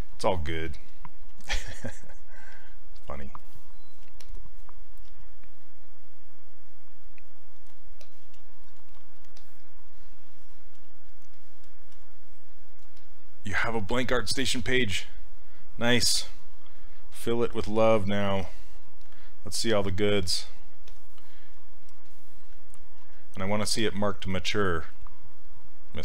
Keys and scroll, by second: 5.1 s, 23.0 s.